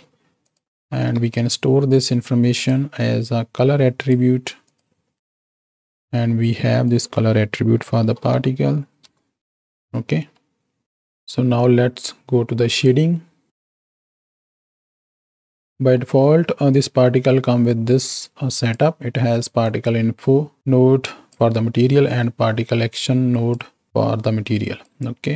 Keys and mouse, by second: 0.5 click, 0.7 x, 1.1 shift+a, 4.6 click, 5.4 click, 6.7-9.0 drag, 9.5 click, 10.4 middle click, 13.6 z, 13.9 KP_7, 16.0 middle click, 16.7-18.7 drag, 19.7-21.4 drag, 22.0-24.9 drag.